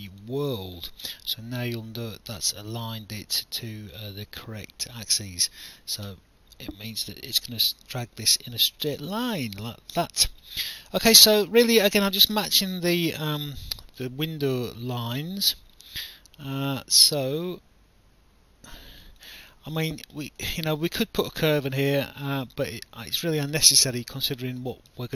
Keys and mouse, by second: 0.1 click, 0.9 alt+click, 3.6 alt+click, 5.5 click, 6.1 alt+click, 8.8 click, 11.5 alt+click, 12.7 click, 14.0 alt+click, 15.5 click, 19.2 alt+click, 20.5 alt+middle click, 23.4 alt+click, 24.6 alt+middle click.